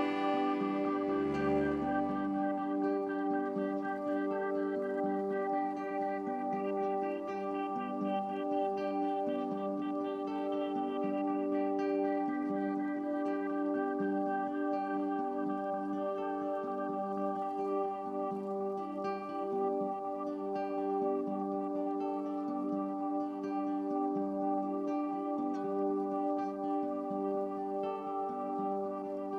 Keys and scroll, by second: 24.4 F10.